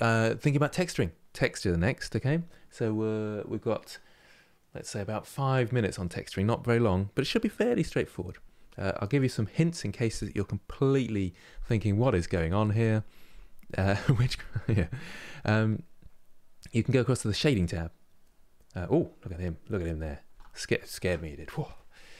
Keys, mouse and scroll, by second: 8.9 click.